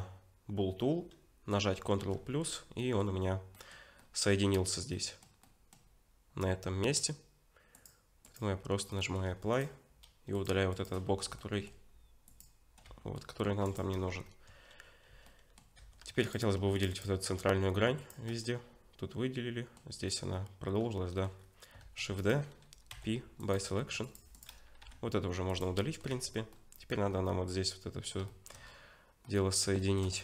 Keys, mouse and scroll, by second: 2.0 ctrl+KP_Add, 2.8 middle click, 3.2-3.5 scroll up 2, 3.5 middle click, 4.9 middle click, 5.4 middle click, 7.7 click, 8.9 middle click, 9.5 click.